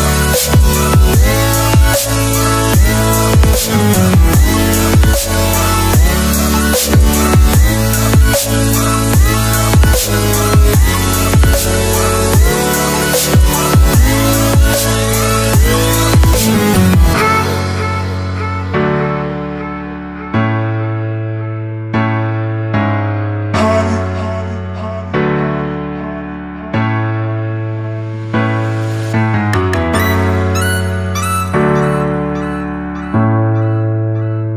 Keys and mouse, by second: 2.6 click, 3.9 click, 4.8-5.3 drag, 5.8 click, 6.3-7.8 middle drag, 8.4 middle click, 9.0 space, 17.9-18.7 middle drag, 20.5-21.6 drag, 22.7 click, 24.2 click, 24.8-26.1 drag, 27.2 click, 30.2 click, 31.4 click, 31.6 typing, 32.4-33.0 drag, 33.0-33.4 typing.